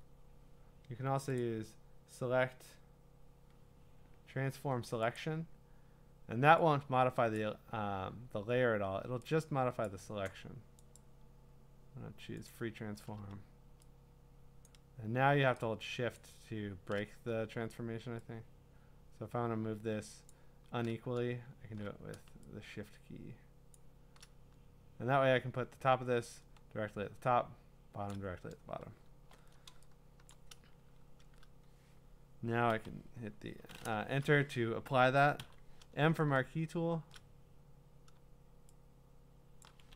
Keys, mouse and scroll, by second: 1.4 click, 3.7 click, 5.2 click, 7.4 click, 9.9 click, 11.0 right click, 12.5 click, 14.7 shift+click, 16.2 shift+click, 20.3 shift+click, 23.7 shift+click, 33.0 click, 33.0 m, 34.0 Return, 35.4 m, 39.6 shift+click.